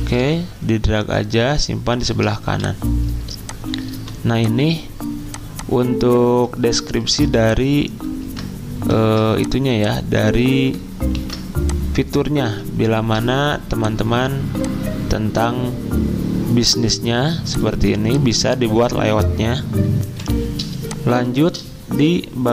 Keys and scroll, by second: 2.4-3.5 typing, 7.0 ctrl+g, 8.2 ctrl+g, 9.0 ctrl+z, 11.2 ctrl+g, 13.0 ctrl+g, 17.7 z, 20.0 F10, 20.0 alt+Tab.